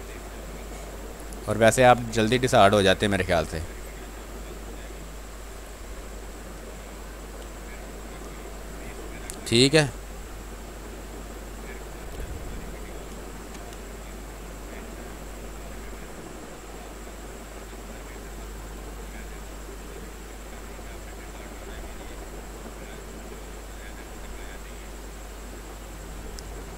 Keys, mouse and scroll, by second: 0.0 click, 2.9 click, 4.1 space, 4.4 alt+click, 5.3-7.3 drag, 7.3 space, 7.7 alt+click, 8.5 click, 9.1 ctrl+d, 10.4 click, 10.8 space, 11.0 click, 11.3 ctrl+space, 11.9 click, 12.1 ctrl+space, 12.3 ctrl+click, 12.6 ctrl+space, 13.3 b, 13.7 ctrl+space, 13.9 ctrl+click, 14.3 click, 14.6 space, 18.9 click, 19.2 space, 21.7-23.5 drag, 23.5 click, 24.6 click, 25.8 click, 26.2 space, 26.5 alt+click.